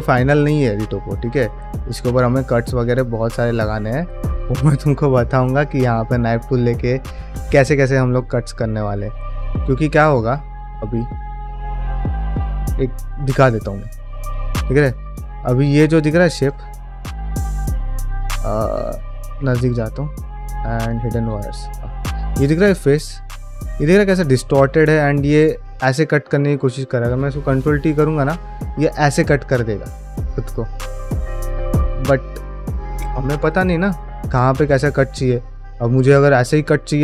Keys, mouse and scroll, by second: 0.2 middle click, 0.7 middle click, 1.7 click, 1.9 g, 2.5 click, 2.6 g, 3.1 click, 3.3 g, 3.8 middle click, 4.1 ctrl+middle click, 4.3 shift+middle click, 4.7 middle click, 6.1 middle click, 8.0-9.5 middle drag, 10.0 Tab, 10.4 ctrl+middle click, 10.8 ctrl+Tab, 11.3 middle drag, 12.4 KP_Divide, 12.7 middle click, 13.1 ctrl+middle drag, 13.4 shift+middle drag, 13.8 ctrl+middle click, 14.1 click, 14.4 middle drag, 14.8 shift+middle drag, 15.1 ctrl+middle drag, 15.4-16.0 middle drag, 16.1 shift+middle drag, 16.5 ctrl+middle click, 16.7-17.4 middle drag, 18.1 ctrl+middle drag, 18.5 ctrl+middle click, 18.8 ctrl+middle click, 19.1 Tab, 20.1 q, 21.1 3, 21.4 click, 21.7-25.4 middle drag, 27.9 middle click, 29.1-34.0 middle drag, 34.1 middle click, 34.6 ctrl+z, 35.0 ctrl+middle click, 35.3 middle click, 36.9 middle click.